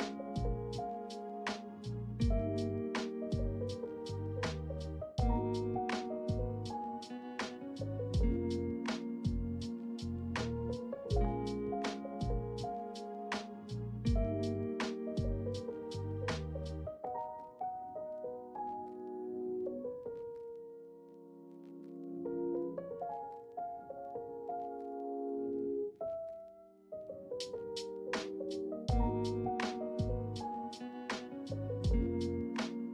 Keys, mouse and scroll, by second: 1.2 r, 4.8 s, 6.1-8.1 middle drag, 9.4 e, 9.8 s, 11.8 e, 12.2 z, 14.4 e, 14.6 s, 16.2 e, 16.6 s, 19.4 m, 23.6 middle click, 25.0 ctrl+r, 28.1 ctrl+r, 31.4-32.9 middle drag.